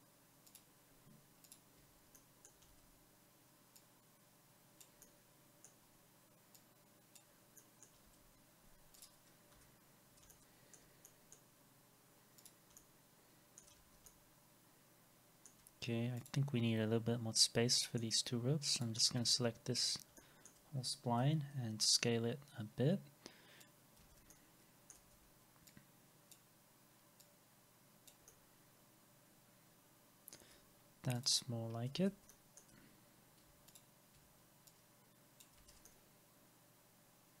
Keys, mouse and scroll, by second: 0.5 ctrl+click, 2.1 alt+middle click, 2.7 alt+x, 5.0 alt+middle click, 7.6 middle click, 8.1 alt+x, 9.5 Delete, 10.3 alt+middle click, 11.0 scroll down 1, 12.8 alt+middle click, 13.8 alt+x, 17.8 middle click, 19.2 alt+x, 20.2 alt+middle click, 21.2 r, 24.0 alt+x, 24.3 alt+middle click, 25.1 w, 28.3 alt+middle click, 31.7 scroll, 31.8 scroll up 1, 32.0 alt+x, 32.3 alt+middle click, 33.7 ctrl+click, 35.6 alt+x, 35.9 alt+middle click.